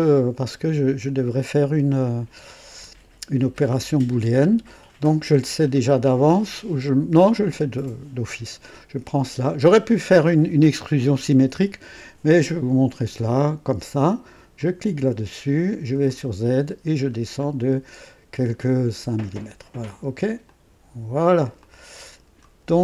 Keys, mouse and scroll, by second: 8.6 click, 14.0 click, 14.6 click, 16.0 click, 16.6-17.2 scroll down 2, 19.0 scroll down 2, 20.4 click, 21.6 click, 22.7-22.8 scroll down 3.